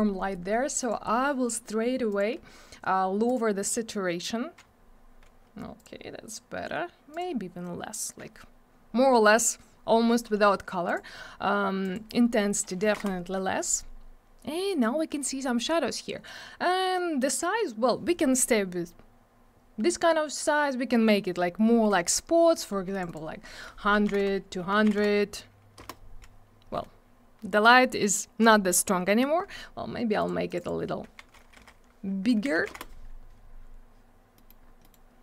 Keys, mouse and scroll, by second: 0.8 click, 0.8 click, 2.1 click, 2.1 click, 3.2 click, 3.3 click, 5.7 click, 5.8 click, 7.1 click, 7.1 click, 10.8 click, 10.9 click, 11.8 click, 11.9 click, 12.8 2, 12.9 Return, 22.9 click, 23.0 click, 23.0 click, 23.1 click, 23.9 1, 24.6 Tab, 24.7 1, 25.7 Return, 30.1 click, 30.2 click, 30.4 click, 30.5 click, 30.5 click, 30.6 double click, 31.0 1, 32.1 Tab, 32.3 1, 32.7 Return, 34.3 middle click, 34.4 middle click, 34.6 scroll down 1, 34.8 middle click, 34.9 double middle click.